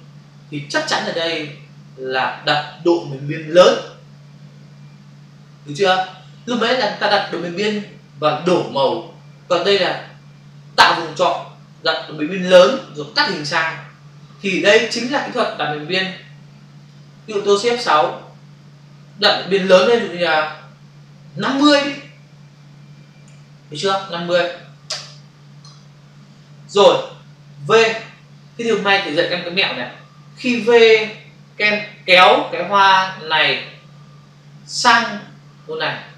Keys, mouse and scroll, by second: 16.7 click, 18.7 shift+F6, 21.4-22.1 typing, 24.9 Return.